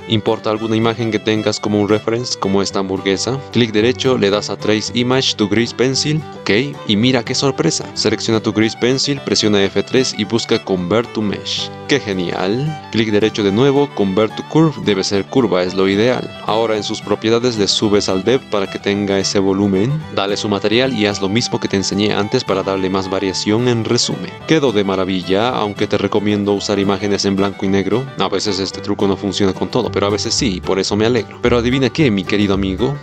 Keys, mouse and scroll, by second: 2.4 click, 3.0 shift+middle click, 3.9-5.9 right drag, 6.7 click, 7.9 g, 9.5 F3, 13.2-14.1 right drag, 14.1 click, 19.3 middle click, 20.0 middle drag, 20.9 ctrl+z, 20.9 click, 20.9-24.0 typing, 21.1 Tab, 21.6 Tab, 22.4 Tab, 22.5 ctrl+z, 22.6 click, 22.9 Tab, 24.0 Tab, 24.2 ctrl+z, 24.5-26.1 middle drag, 30.0-31.4 middle drag, 32.4 click.